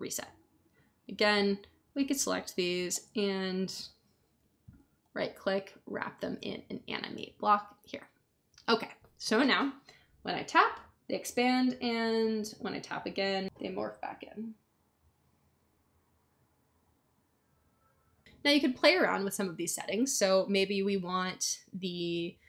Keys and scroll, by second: 4.3 Up.